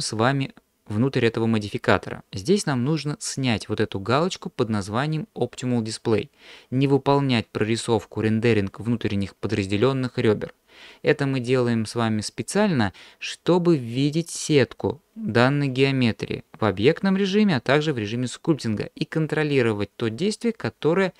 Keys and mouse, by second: 12.5 click.